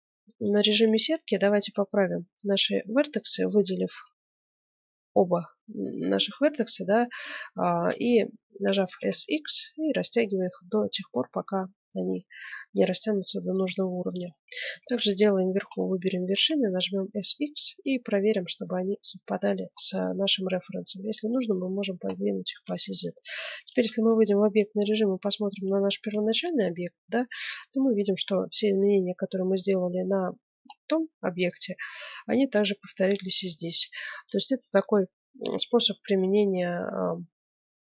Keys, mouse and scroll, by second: 0.6 ctrl+Tab, 1.4 a, 1.9 b, 2.9 b, 6.8 z, 8.8 s, 13.8-14.9 middle drag, 14.7 a, 14.9 b, 15.6-17.7 middle drag, 16.3 s, 19.0-20.3 middle drag, 20.3-22.2 drag, 22.1-24.3 middle drag, 23.4 Tab, 26.1 z, 26.5 click, 28.1-29.6 middle drag, 30.2-34.8 middle drag, 34.8 KP_1, 35.9 middle click, 36.4-37.8 middle drag.